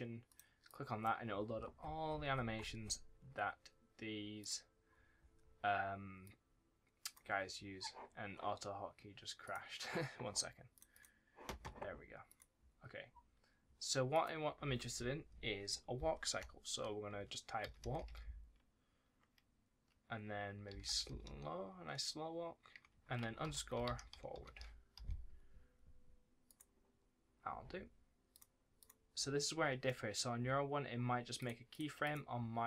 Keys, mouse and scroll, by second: 28.7 click, 29.0-29.4 scroll down 1, 29.4-29.8 scroll up 1, 29.8 middle click, 30.3-31.3 scroll down 1, 31.3 click, 32.2 scroll down 1, 32.5 middle click.